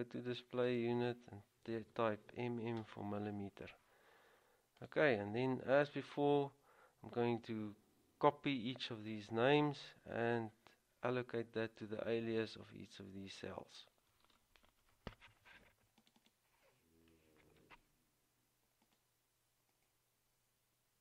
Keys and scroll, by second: 1.8 typing, 3.0 Return, 17.8 ctrl+c.